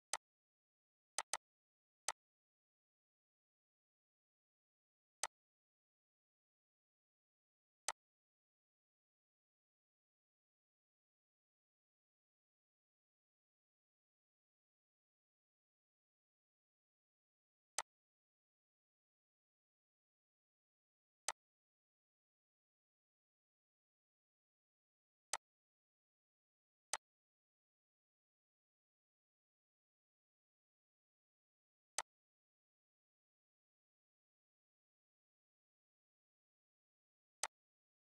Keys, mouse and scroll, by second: 0.0-3.8 drag, 3.8 right click, 5.2 click, 7.8 click, 7.9-17.8 drag, 21.3-23.6 drag, 23.6 right click, 25.2-31.0 drag, 31.5 click, 32.0-38.1 shift+drag.